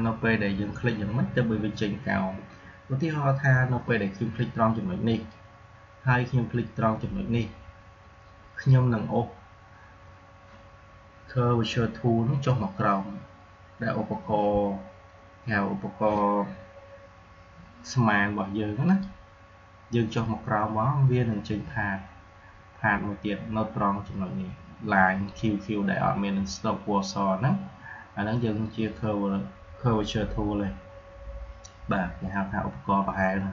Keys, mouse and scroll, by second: 5.0 click, 18.8 click.